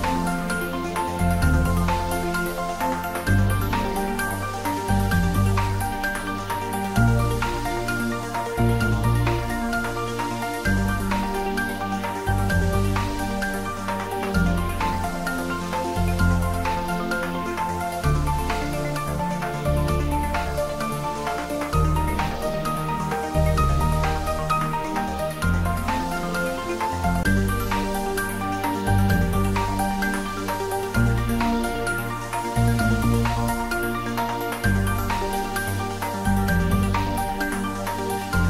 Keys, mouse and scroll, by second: 1.7 shift+a, 4.1 click, 8.5 click, 9.4-9.9 scroll down 1, 11.2 click, 13.1-14.4 typing, 14.2 click, 17.5 click, 19.1-20.6 typing, 20.6 click, 21.1-23.3 middle drag, 23.3-24.0 scroll up 1, 24.0 s, 25.9 click, 27.4-28.0 typing, 29.3 click, 30.3 scroll down 1, 30.9-31.8 middle drag, 32.5 s, 33.2 click, 33.5-34.1 middle click, 34.5 scroll down 1, 36.5 click.